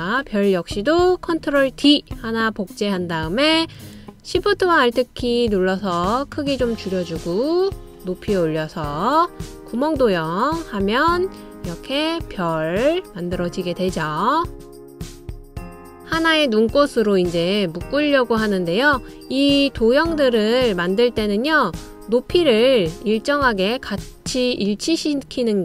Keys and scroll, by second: 2.4 super+d.